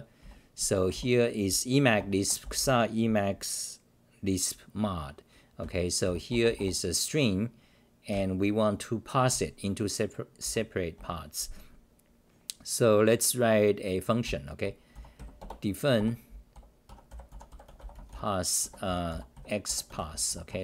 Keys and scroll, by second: 0.9 t, 1.9 Return, 2.2 Return, 2.4 c, 2.6 c, 5.6 r, 6.0 d, 8.1 ctrl+=, 10.4 s, 10.9 Return, 14.0-15.4 typing, 16.8-19.6 typing, 20.5 Home.